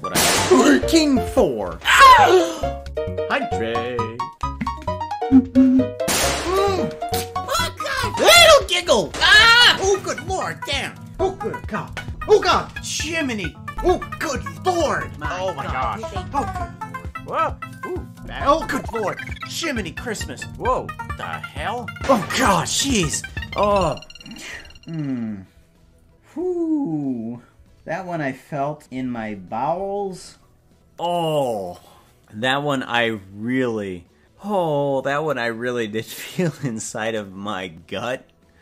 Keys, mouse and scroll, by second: 8.3 click, 13.9 space, 15.8 s.